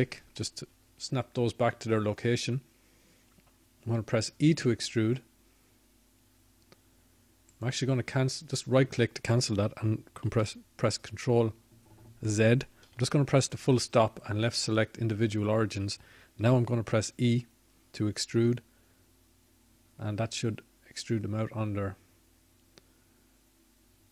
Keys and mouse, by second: 2.8 shift+d, 10.5 e, 16.6 ctrl+z, 18.7 ., 22.5 e.